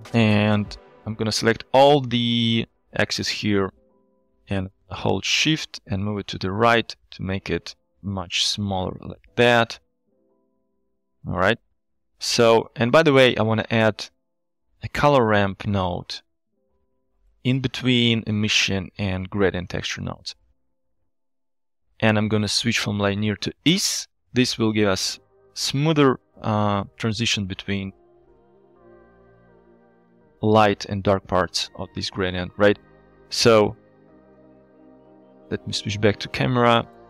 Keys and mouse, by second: 0.8-9.3 drag, 12.3 shift+middle click, 13.8 click, 14.4 shift+a, 19.7 click, 21.2 middle click, 21.4 shift+click, 22.6-23.8 drag, 31.4 KP_1, 35.3 Right, 35.3 KP_0.